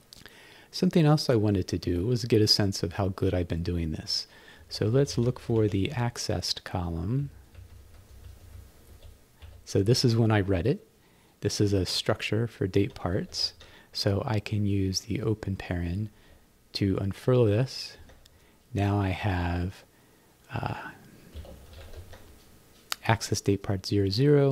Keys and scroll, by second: 4.4-6.1 typing, 7.2 Right, 7.9 Right, 8.5 Right, 8.9 Left, 9.9 Right, 13.2 shift+-, 16.2 shift+(, 22.1 shift+-.